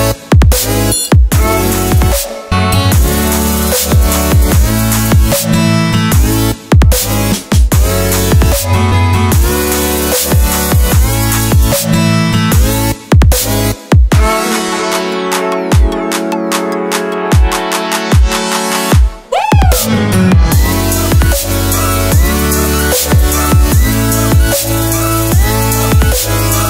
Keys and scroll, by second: 1.8 6, 6.4 7, 8.5 8, 9.9 9, 14.7 p, 21.0 x.